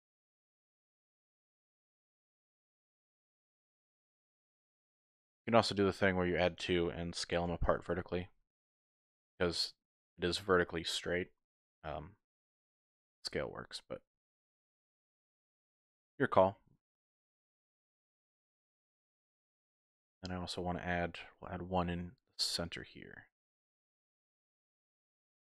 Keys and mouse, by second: 0.6 shift+middle click, 2.7 ctrl+r, 4.7 click, 5.0 ctrl+r, 6.6 click, 7.5 s, 7.6 z, 10.0 click, 11.1 shift+click, 12.5 ctrl+r, 14.7 click, 15.1 s, 15.3 z, 17.5 click, 17.9 middle click, 19.7 middle click, 21.2 ctrl+r, 22.5 click, 23.0 shift+middle click, 25.1 ctrl+r.